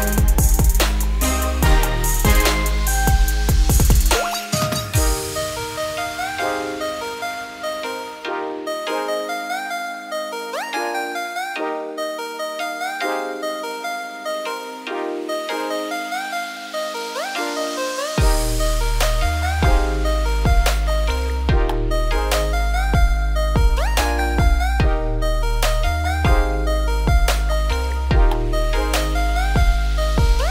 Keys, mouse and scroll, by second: 0.2-0.5 scroll down 3, 0.6 middle click, 1.0-1.9 scroll up 4, 1.9 click, 2.2 middle click, 2.6 `, 3.1 shift+middle click, 3.5-5.5 scroll down 29, 4.5 middle click, 5.5 ctrl+b, 9.1-9.4 scroll down 2, 9.4 shift+middle click, 10.1 click, 10.3 `, 10.8-11.8 scroll down 9, 11.8 ctrl+b, 13.9 scroll down 6, 14.1 `, 14.6-14.9 scroll down 7, 15.5-16.6 scroll down 11, 16.6 ctrl+b, 19.4 scroll down 2, 19.5 middle click, 20.3-20.8 scroll up 3, 20.8 click, 21.2 middle click, 21.7 g, 23.3 shift+middle click, 23.8 `, 24.4-25.8 scroll down 32, 26.1 middle click, 26.5 e, 29.4 middle click, 30.1 click, 30.4-30.5 scroll up 3.